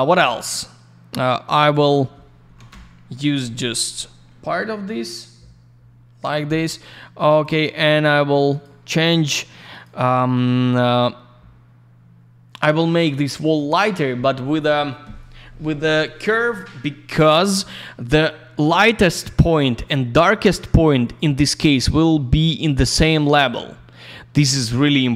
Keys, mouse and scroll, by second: 1.6 click, 1.7 click, 1.8 click, 1.9 double click, 2.5 8, 2.7 Return, 4.8-5.4 scroll up 1, 5.4 scroll down 1, 6.6 middle click, 7.3 click, 7.4 click, 7.5 click, 7.6 double click, 8.5 click, 8.6 click, 9.7 click, 9.8 click, 16.4 click, 16.5 click, 17.4 click, 17.5 click, 21.1 click, 22.5 right click, 23.2 click.